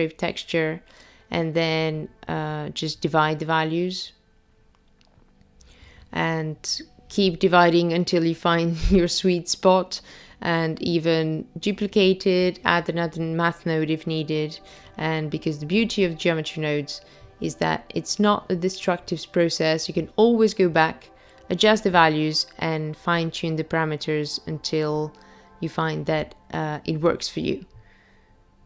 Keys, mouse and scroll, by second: 1.7 click, 4.5 click, 8.4 click, 9.2 space, 16.1-18.1 scroll up 2, 18.1-19.0 scroll down 2, 19.0 space, 20.0 click, 20.5 click, 21.8 shift+d, 24.3 space, 27.8 space, 28.5 click.